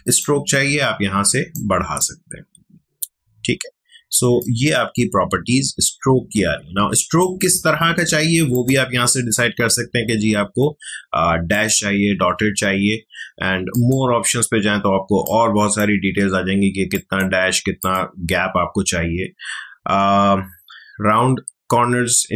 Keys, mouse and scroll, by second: 7.2 click, 7.2 click, 11.5-16.9 drag.